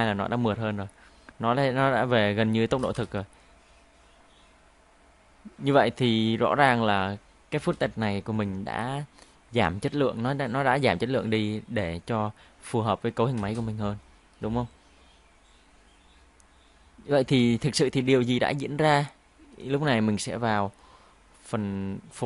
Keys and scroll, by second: 2.7 space, 2.9 space, 7.5 space, 13.4 space, 17.2 space.